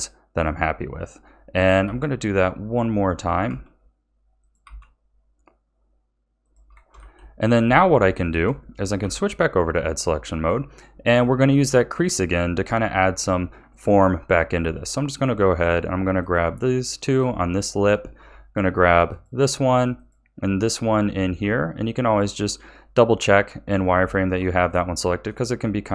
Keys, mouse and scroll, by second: 1.8 e, 4.6 e, 6.9 a, 7.3-9.0 middle drag, 9.0 2, 9.5-10.0 scroll up 2, 10.0-13.6 middle drag, 13.6-14.1 scroll up 1, 14.1-15.1 scroll up 1, 15.1 alt+shift+click, 16.2 alt+shift+click, 17.6-19.0 middle drag, 19.0 alt+shift+click, 19.9 alt+shift+click, 20.9 z, 22.0-23.9 middle drag, 23.9 z, 24.6-25.9 middle drag.